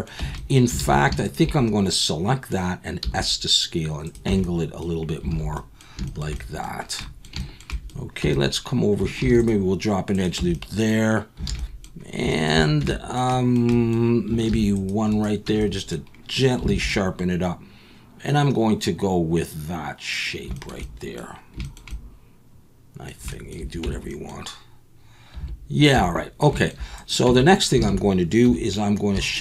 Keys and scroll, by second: 0.2 Tab, 0.8 alt+a, 3.0 s, 4.3 Tab, 5.3 alt+a, 8.2 Tab, 9.2 ctrl+r, 10.4 Tab, 11.5 alt+a, 12.8 Tab, 14.5 ctrl+r, 15.4 Tab, 16.7 alt+a, 23.8 Tab, 25.8 Tab, 25.9 Tab, 26.8 Tab, 27.3 Tab, 27.8 alt+a, 28.4 2.